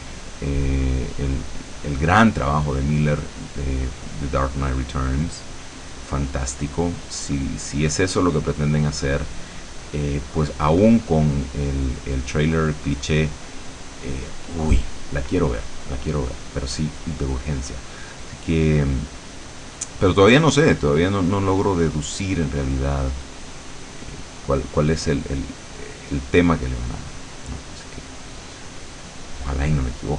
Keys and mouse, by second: 7.2-10.0 drag, 11.2-14.8 drag, 18.6-20.0 drag, 20.8-23.5 drag, 23.8-27.8 drag, 28.9 middle click.